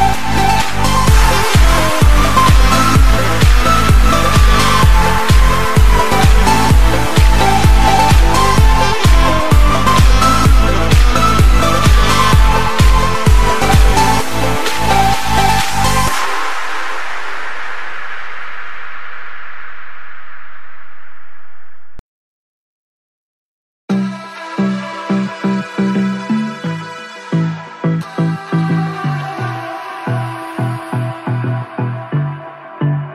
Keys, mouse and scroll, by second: 1.7-2.2 scroll up 1, 2.2 s, 4.2-5.5 scroll down 2, 5.5-9.6 drag, 9.6-10.0 scroll up 1, 10.0 shift+middle click, 10.4-11.2 scroll up 2, 11.2 click, 12.7 KP_1, 13.3-13.7 scroll up 2, 15.0-17.1 shift+drag, 17.1 scroll down 1, 17.4 shift+middle click, 18.1-19.2 drag, 19.2 KP_3, 19.8-21.3 scroll down 2, 22.9-26.5 drag, 28.4 KP_7, 29.8-32.1 drag, 33.0 click.